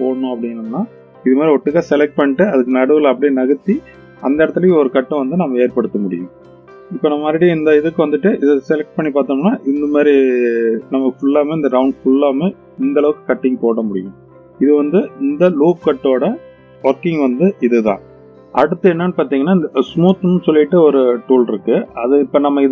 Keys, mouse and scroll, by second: 6.9 click, 7.4 click, 9.8 click, 10.5-13.0 middle drag.